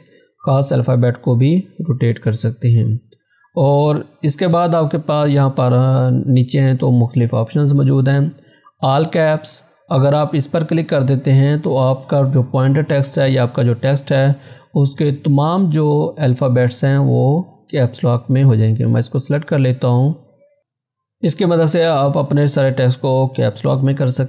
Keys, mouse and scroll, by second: 1.8-3.5 scroll down 1, 17.1 click, 17.1 click, 20.2 click, 23.5 click.